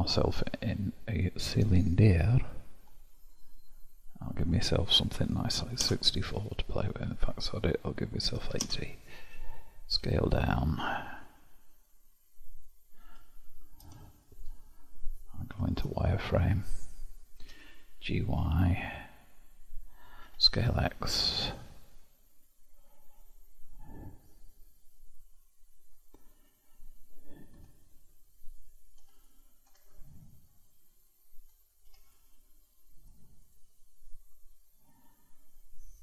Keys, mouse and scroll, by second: 1.8-2.7 scroll down 17, 2.7-3.6 scroll up 1, 4.3-10.0 drag, 10.0 s, 13.0 KP_Decimal, 14.0-15.5 shift+middle drag, 15.5 shift+z, 16.1-16.8 scroll down 1, 16.8-17.3 scroll down 1, 17.3 g, 27.5 Tab, 27.9-28.9 middle drag, 28.9 Tab, 29.1-29.7 drag, 29.7 Tab, 30.1-31.9 middle drag, 31.9 3, 32.1 click, 32.9 click, 33.4 click.